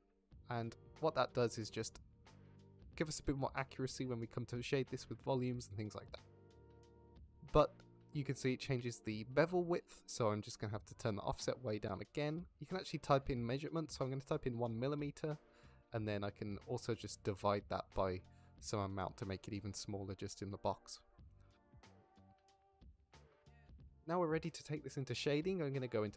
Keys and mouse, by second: 4.6 shift+middle click, 5.6-5.9 shift+middle drag, 6.6-7.0 drag, 8.0 shift+click, 8.8 shift+click, 10.0-12.4 shift+drag, 12.6-13.6 drag, 13.5 m, 14.5-18.0 drag, 19.1-21.7 middle drag, 22.9 middle drag, 23.7-24.1 middle drag, 24.3 shift+middle drag, 24.6 middle drag, 25.4 middle drag, 26.1 ctrl+s.